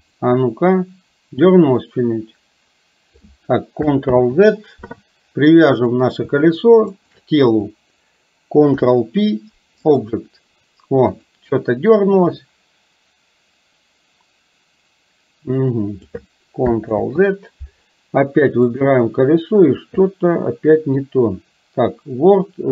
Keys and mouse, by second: 0.1 click, 2.1-3.4 drag, 4.2 ctrl+z, 5.8 click, 7.0 click, 8.7 ctrl+p, 11.2 click, 12.6-16.2 drag, 17.0 ctrl+z, 18.7 click.